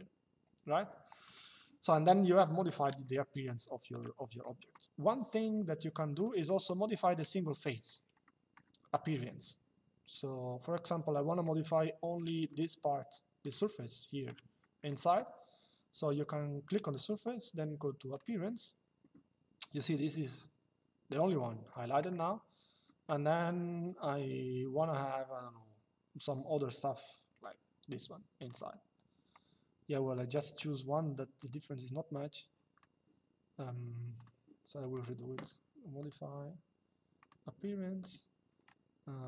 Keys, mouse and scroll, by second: 0.9 click, 5.9 click, 8.0 shift+middle click, 11.4 shift+middle click, 12.2 click, 13.3 shift+middle click, 16.6 click, 17.9 click, 24.6 click, 27.1 click, 29.9 click, 31.1 click, 33.9 click, 35.7 click, 36.9 click.